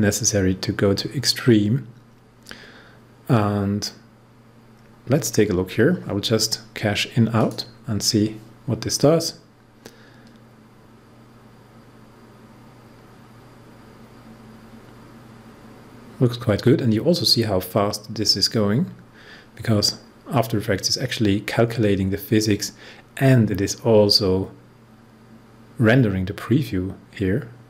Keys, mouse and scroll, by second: 7.3 click.